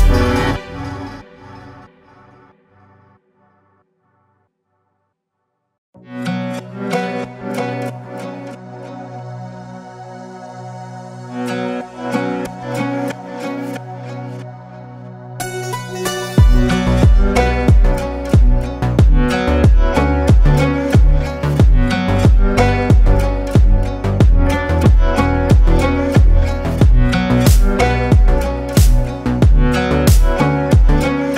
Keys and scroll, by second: 4.7 Down, 5.1 Down, 10.9 ctrl+space.